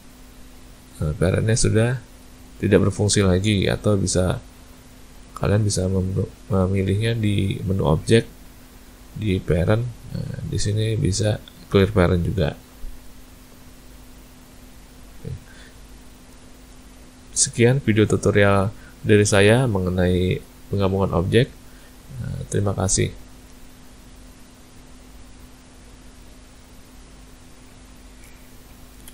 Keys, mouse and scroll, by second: 0.8 click, 1.4 click, 2.2 click, 2.8 click, 4.9-5.2 shift+click, 5.2 click, 5.5 shift+click, 7.0 click, 14.9 click, 16.0 shift+middle click, 16.6 middle click, 19.6 click.